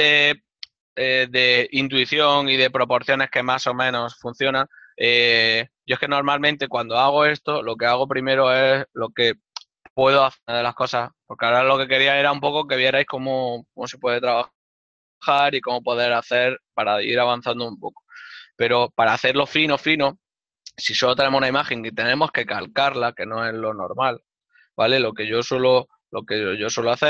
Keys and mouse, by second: 5.9 click, 8.0 click, 20.6 n, 23.9 middle click, 25.6 middle click.